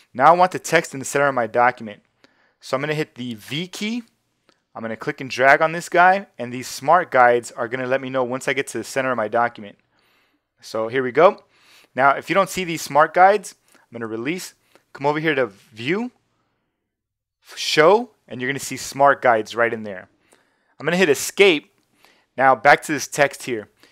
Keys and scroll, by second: 3.4 shift+v, 21.2 Escape.